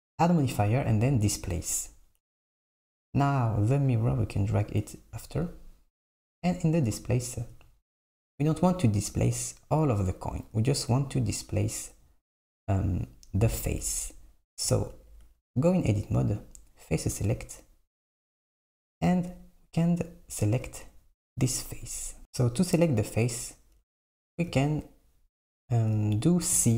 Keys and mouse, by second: 1.8-2.7 drag, 4.0-4.7 drag, 12.5 click, 15.3 Tab, 17.2-18.4 drag, 23.0 click, 26.6 c.